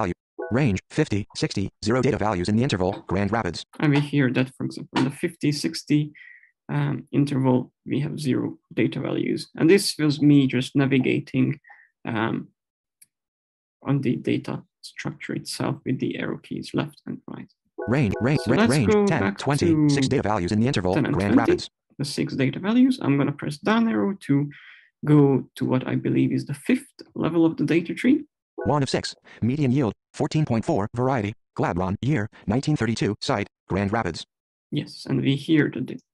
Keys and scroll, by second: 17.5 Left, 27.9 Down.